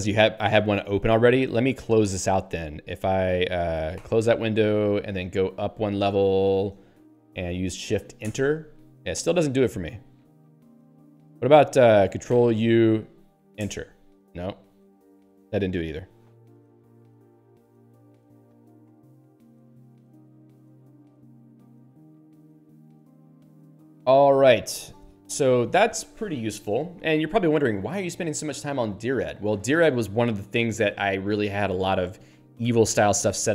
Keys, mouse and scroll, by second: 1.4 click, 6.6 ^, 8.4 Return, 10.4 ^, 12.4 ctrl+u, 13.8 Return, 18.2 q.